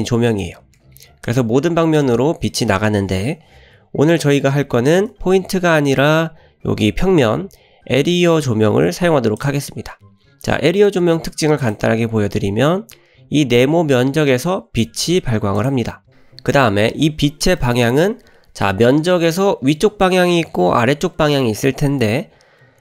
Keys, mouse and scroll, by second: 0.8 g, 3.7 Delete, 4.8 shift+a, 10.0 scroll down 1, 10.7 middle drag, 10.7 scroll down 2, 11.1 g, 11.9 scroll up 2, 12.4 scroll down 1, 14.9 s, 15.8-16.2 scroll up 3, 17.6 shift+middle click, 18.1-18.7 middle drag, 22.5-22.8 scroll up 2.